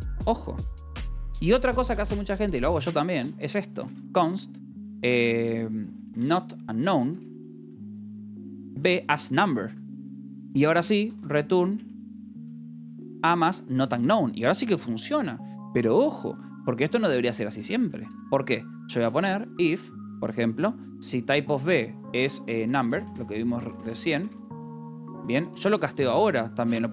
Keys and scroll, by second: 1.7-4.4 typing, 5.6-13.7 typing, 7.6 Return, 8.3 Escape, 13.4 Escape, 16.7-20.0 typing, 20.4 Return, 20.8 Escape, 22.2-25.0 typing, 25.4 Return.